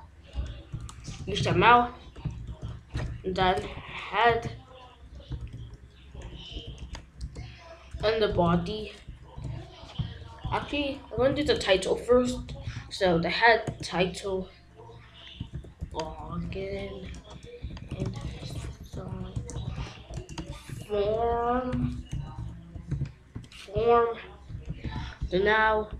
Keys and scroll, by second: 0.6-2.3 typing, 2.9 Return, 3.4 shift+,, 3.7 h, 4.2 e, 4.9 Return, 5.4 ., 6.3 BackSpace, 6.6 shift+., 7.1 Return, 8.3 shift+,, 8.6 b, 11.1 t, 11.4 i, 12.1 Down, 12.3 Return, 12.6 shift+., 15.3-23.8 typing, 24.8 ctrl+s.